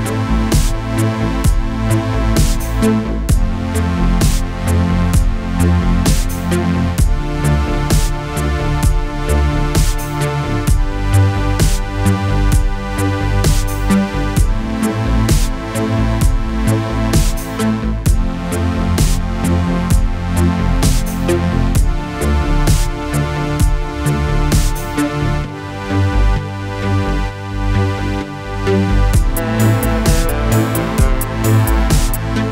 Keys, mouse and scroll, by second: 0.7 shift+click, 3.1 click, 6.7 click, 8.0 click, 16.0 click, 17.5 click, 19.3 Return, 20.8 click, 22.4-23.9 click, 25.5 Return, 26.2-27.5 drag, 31.6 Return, 31.8-32.5 typing.